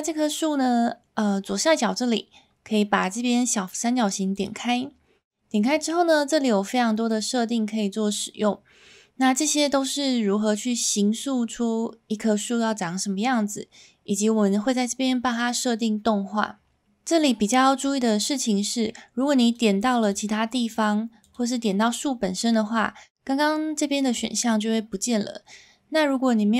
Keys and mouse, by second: 5.9-7.2 drag, 19.5 click, 21.3-26.5 drag.